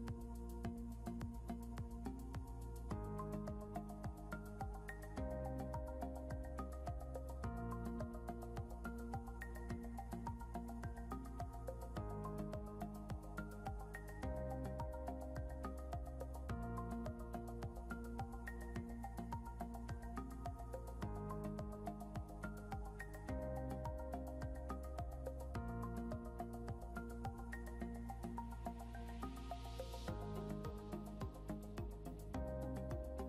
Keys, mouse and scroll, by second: 2.7 scroll up 1, 3.2 click, 5.3 ctrl+l, 6.3 scroll down 1, 7.1 click, 7.8 scroll down 1, 8.4 scroll up 1, 10.5 click, 14.2 /, 17.3 /, 22.2 p, 24.8 click, 29.5 scroll up 1, 32.4 ctrl+q.